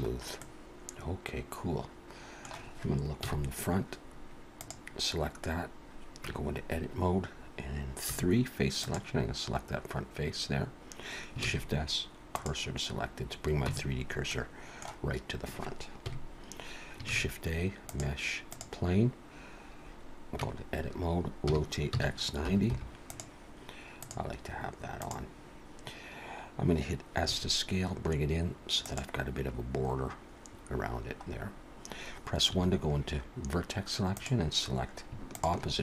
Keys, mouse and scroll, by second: 0.1 scroll up 1, 0.4 middle click, 3.2 KP_1, 4.6 click, 7.6 Tab, 8.1 3, 8.7 click, 10.2-11.1 scroll up 1, 11.4 shift+s, 13.6 Tab, 14.3 middle click, 16.0 KP_1, 17.1 shift+a, 20.4 Tab, 21.5 r, 24.0 click, 27.3 s, 31.3-32.5 scroll up 2, 32.5 1, 34.0 click, 35.3 shift+click.